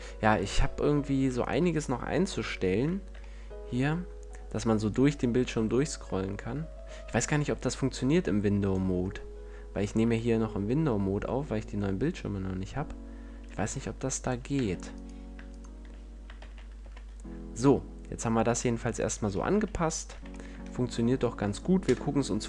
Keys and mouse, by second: 0.7 a, 1.3-2.7 drag, 2.2 ctrl+l, 6.2-8.2 drag, 9.0-13.0 middle drag, 13.3-17.2 drag, 14.4 Tab, 16.3 shift+d, 18.9-20.6 drag, 19.4 a, 20.0 z, 21.7 KP_0.